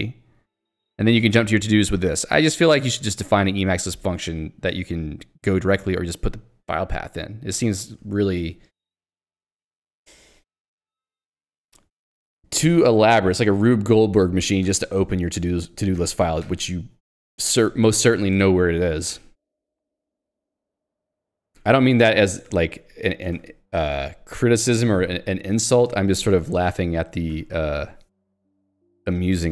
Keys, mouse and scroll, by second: 2.2 click, 3.2 click, 12.3 j, 21.8 k, 25.6 j, 25.9 k, 27.5 j, 29.2 click.